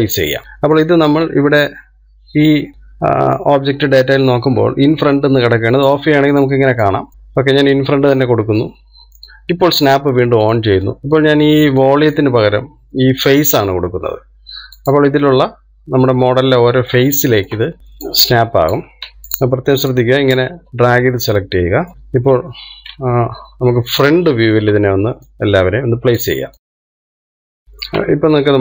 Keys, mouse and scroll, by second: 0.3 scroll up 1, 0.4-3.0 middle drag, 7.1 click, 7.6 click, 8.2 click, 9.5-11.8 middle drag, 11.8 click, 13.1-16.2 drag, 17.7 shift+middle click, 18.2-19.1 scroll up 1, 19.1 click, 19.8 ctrl+z, 20.6 click, 21.3 click, 21.9-23.5 middle drag, 23.5 KP_1, 25.4-26.6 shift+middle drag, 26.6 click, 27.2 click, 27.6 click.